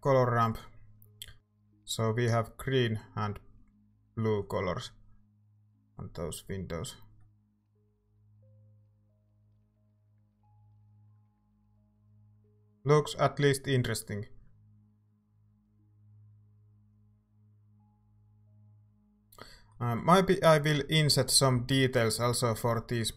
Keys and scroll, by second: 11.5 ctrl+s, 21.7 z.